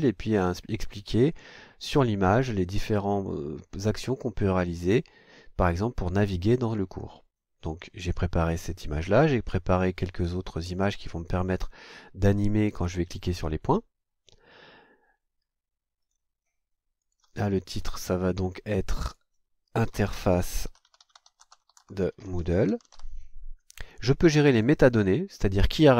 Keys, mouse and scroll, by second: 16.0 click, 17.0 click, 19.0 click, 19.6-23.4 typing, 24.5 click.